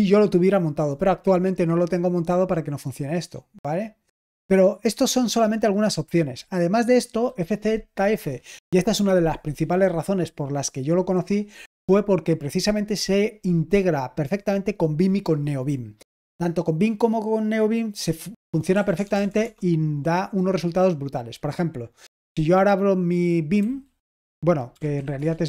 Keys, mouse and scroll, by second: 1.6-2.5 scroll up 1, 2.5-5.2 scroll down 2, 5.9-6.8 scroll up 2, 18.7-19.3 typing, 23.5-25.4 typing.